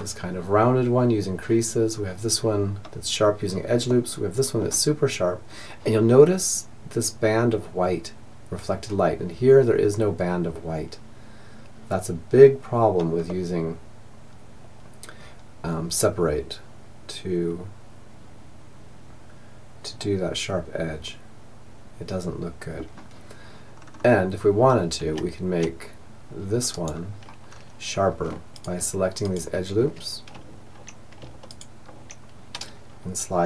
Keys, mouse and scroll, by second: 2.9-4.8 middle drag, 12.3-14.1 middle drag, 22.7-25.0 middle drag, 24.2 Tab, 26.6-27.7 middle drag, 30.5-32.9 right drag, 32.9 s.